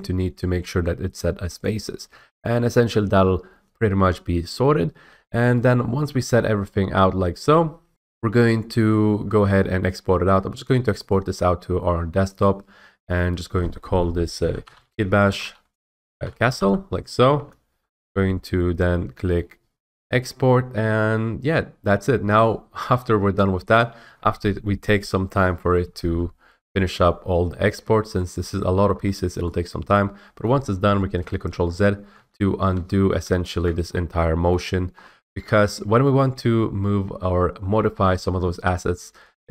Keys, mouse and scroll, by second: 1.6 click, 11.0 click, 12.3 click, 14.3-16.6 typing, 17.3 Return, 20.0-22.0 drag, 22.9 middle click, 28.1 middle click, 28.8 middle click, 29.0 middle click, 30.4 middle click, 31.4 ctrl+z, 32.1 ctrl+z, 32.7 ctrl+z, 33.1 ctrl+z, 33.9-34.2 scroll, 34.5 middle click, 34.9 middle click, 35.0 middle click, 35.4 scroll, 39.3-39.5 middle drag.